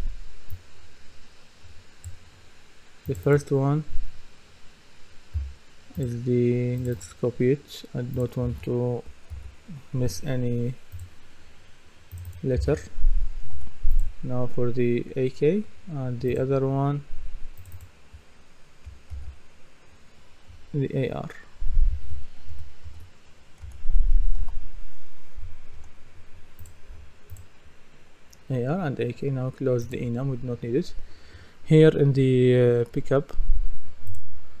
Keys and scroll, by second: 22.5 Right, 23.6 BackSpace, 24.4 shift+r, 25.8 Return.